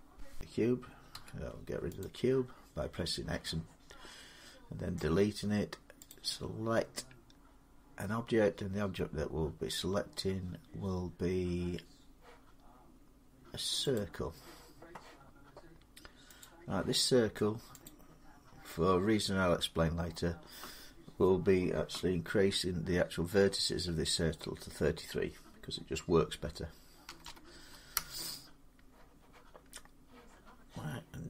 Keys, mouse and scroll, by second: 0.2 click, 0.9 x, 1.8 click, 5.9 click, 10.6 click, 13.7-16.7 drag, 17.6 click, 26.8 3, 27.0 3, 27.7 Return.